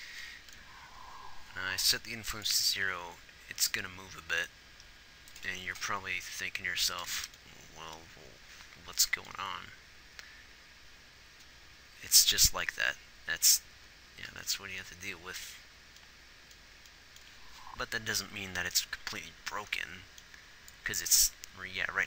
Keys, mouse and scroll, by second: 0.1 ctrl+s, 2.9 ctrl+s.